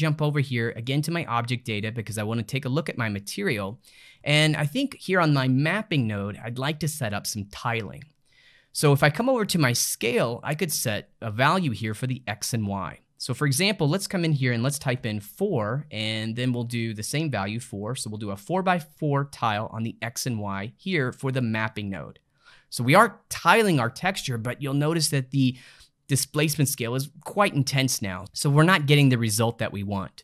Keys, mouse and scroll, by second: 1.5-8.2 middle drag, 8.8-12.7 ctrl+middle drag, 13.5-19.5 drag, 20.6-23.8 middle drag, 30.0 middle click.